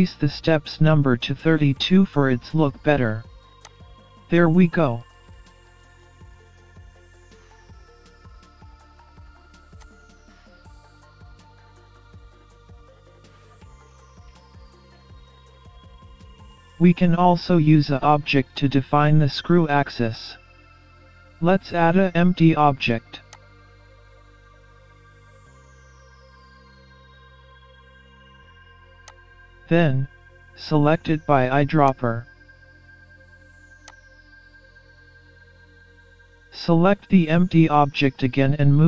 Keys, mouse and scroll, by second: 3.7 click, 6.4 scroll up 2, 6.6 middle click, 7.4 scroll down 3, 7.6-8.2 scroll up 2, 9.8 click, 12.2 scroll up 2, 12.4 middle click, 15.0 middle click, 15.8 scroll down 3, 16.2-16.6 scroll up 3, 17.2 middle click, 19.8 shift+a, 24.2-24.5 scroll up 3, 24.5 middle click, 25.9 scroll up 5, 27.4 middle click, 28.2-29.1 scroll down 4, 29.1 click, 31.9 click.